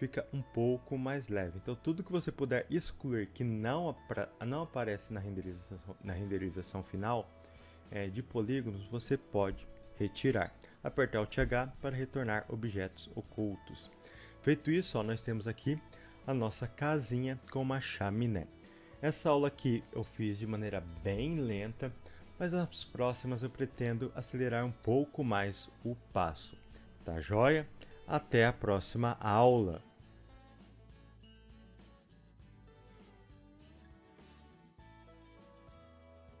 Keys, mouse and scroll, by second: 0.0-10.9 middle drag, 10.9 alt+h, 11.5 middle click, 12.4-13.1 scroll down 1, 13.1 Tab, 13.5-36.4 middle drag.